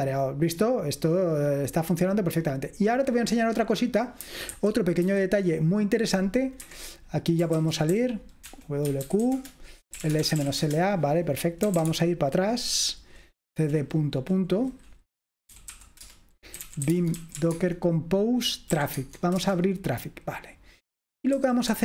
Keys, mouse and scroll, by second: 0.8-4.0 drag, 4.6 super+7, 5.3 super+8, 6.6 Escape, 7.6-12.3 typing, 15.6-19.2 typing, 19.4 Return, 21.4-21.8 typing.